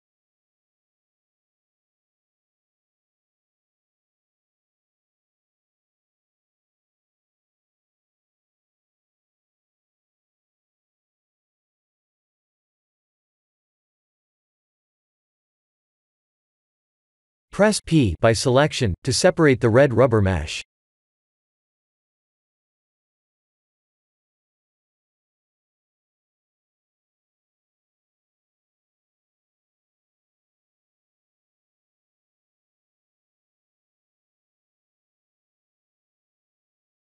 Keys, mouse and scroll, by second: 0.3 Tab, 0.7 3, 1.1 click, 3.1 alt+shift+click, 4.9 click, 5.7 click, 6.8 click, 9.4 click, 15.3 click, 17.8 p, 19.6 Tab, 20.0 click, 20.9 s, 23.4 Tab, 24.1 Tab, 25.1 KP_7, 26.5 Tab, 27.6 shift+click, 28.3 Tab, 29.0 shift+click, 30.2 ctrl+j, 30.9 middle click, 32.4 s, 34.3 KP_1, 35.1 KP_7, 36.7 g.